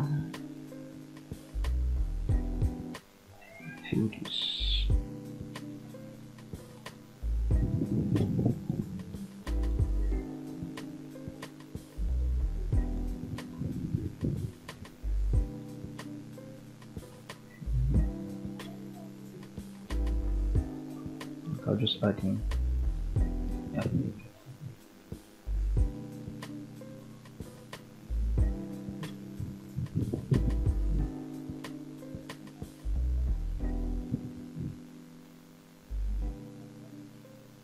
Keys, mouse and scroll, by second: 2.4 ctrl+click, 3.7 f, 4.4-5.6 middle drag, 6.1 middle click, 7.0 click, 7.9 shift+click, 8.9 shift+click, 10.0 shift+click, 10.8 f, 11.5 click, 12.2 shift+click, 12.6-13.6 scroll down 2, 12.9-15.0 middle drag, 16.0 f, 16.5-20.1 middle drag, 25.2 Escape, 25.2-25.6 scroll down 2, 25.6 middle click, 26.7 scroll up 2, 27.4 click, 28.1 shift+click, 28.6-29.0 scroll down 2, 29.0 middle click, 29.6-30.4 scroll up 2, 30.4 f, 30.9-33.0 middle drag, 33.6 f, 34.1-34.5 scroll down 1, 34.5 middle click, 35.7 f, 36.2-37.6 middle drag.